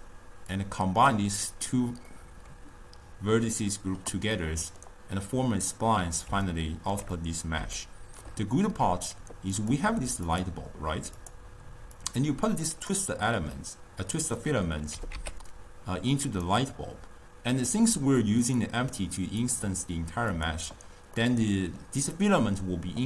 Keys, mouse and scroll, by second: 0.6 click, 2.2-7.7 middle drag, 7.7 scroll up 2, 7.9-9.7 shift+middle drag, 9.7 click, 10.3 click, 11.2 click, 12.0 click, 13.6-15.0 middle drag, 15.0 g, 18.5 click, 19.5 click, 20.4 click, 21.3-23.0 middle drag.